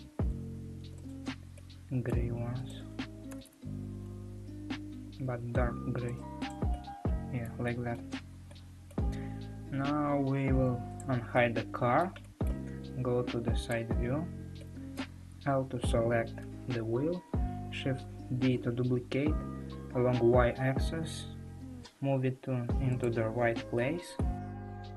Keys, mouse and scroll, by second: 1.2 click, 1.5-2.7 middle drag, 2.7 shift+click, 3.3 ctrl+KP_Add, 3.5 ctrl+KP_Add, 5.3 g, 6.5 click, 6.7-8.2 middle drag, 8.2-8.5 scroll down 1, 8.5-9.0 middle drag, 9.0-9.6 scroll down 1, 9.6 a, 10.4 alt+h, 11.1 click, 11.3-13.7 middle drag, 13.7 KP_3, 14.6 shift+middle click, 14.8-16.2 shift+middle drag, 16.3 middle click, 17.8 shift+d, 23.8-24.4 middle drag, 24.4 scroll down 1, 24.8 click.